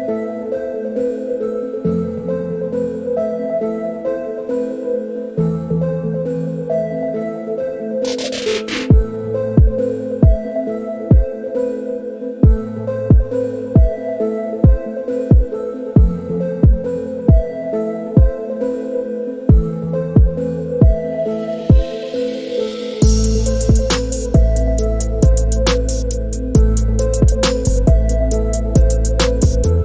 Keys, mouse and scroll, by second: 1.3 click, 1.7 s, 6.0-7.0 middle drag, 8.4-10.5 middle drag, 11.5-11.9 middle drag, 14.9 shift+middle click, 16.0 shift+middle click, 19.9 click, 22.0 ctrl+r.